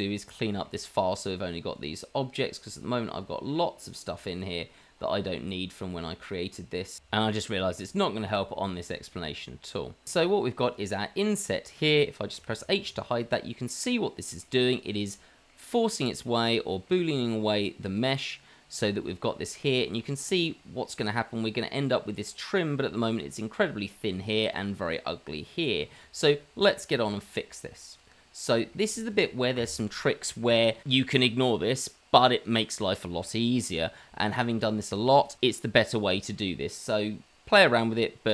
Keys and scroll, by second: 1.5 Delete, 2.9 Delete, 4.0 Delete, 4.8 Delete, 5.1 Delete, 5.5 Delete, 5.7 Delete, 5.9 Delete, 6.0 Delete, 6.2 Delete, 6.3 Delete, 6.4 Delete, 6.5 Delete, 6.7 Delete, 7.8 Delete, 12.3 h, 14.6 h.